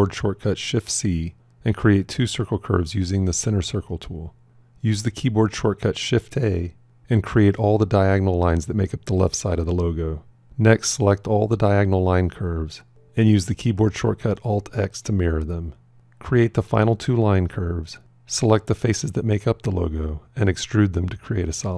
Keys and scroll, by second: 4.4 shift+a, 13.1 alt+x.